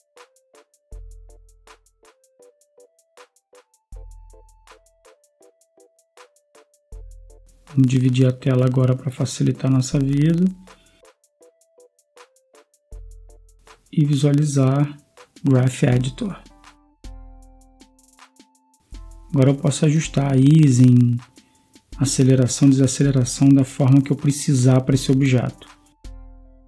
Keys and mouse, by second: 5.1-10.3 drag, 10.3 click, 21.4 click, 21.6 click, 22.1 click, 26.5 click.